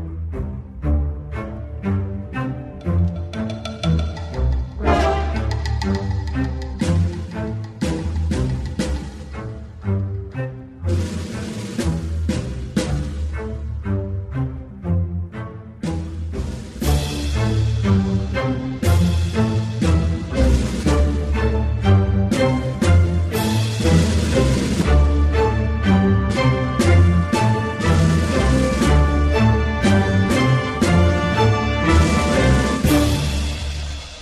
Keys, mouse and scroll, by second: 1.3 alt+middle click, 1.4-2.7 ctrl+alt+drag, 2.8 alt+click, 2.9 alt+middle click, 3.2 ctrl+click, 3.9 ctrl+z, 4.1 ctrl+click, 4.7 alt+middle click, 4.8-6.4 alt+drag, 6.4 alt+middle click, 6.5 alt+click, 6.7 alt+middle click, 7.0 alt+click, 7.1-8.1 alt+middle drag, 8.1 alt+right click, 8.4 m, 8.6 click, 9.1 shift+c, 9.2 ctrl+alt+click, 10.2 ctrl+z, 10.4 ctrl+click, 11.1 alt+middle click, 11.5-13.7 ctrl+drag, 13.7 alt+middle click, 13.9 alt+right click, 14.1 alt+middle click, 14.1 alt+click, 14.3 alt+middle click, 14.4 alt+click, 14.6 alt+middle click, 14.8 alt+click, 15.0 alt+middle click, 15.3 shift+click, 15.5 alt+middle click, 15.6 alt+right click, 15.7 alt+click, 16.0 alt+right click, 16.4 alt+m, 16.5 g, 16.7 alt+click, 16.8 alt+middle click, 16.9 f, 17.1 click, 17.3 f, 17.7 click, 17.7 f, 18.3 click, 18.9 f, 19.0 click, 19.2 f, 19.3-20.6 drag, 20.6 f, 20.7 alt+click, 20.8 alt+middle click, 21.1 click, 22.0 f, 22.1 click, 22.3 f, 22.6 click, 22.9 ctrl+z, 23.2 click, 24.0 c, 24.4-25.5 drag, 25.5 i, 25.6 click, 26.3 f, 26.4-27.4 drag, 27.4 alt+middle click, 27.5 alt+right click, 27.8 shift+click, 28.2 g, 28.5-29.5 drag, 29.6 click, 30.3 ctrl+z, 30.5 f, 30.7 f, 30.8 shift+click, 31.3 alt+right click, 31.5 alt+click, 31.6 alt+middle click, 31.8 p, 32.0 alt+click, 32.2 p, 32.7 click, 33.2 alt+middle click, 33.4 alt+click.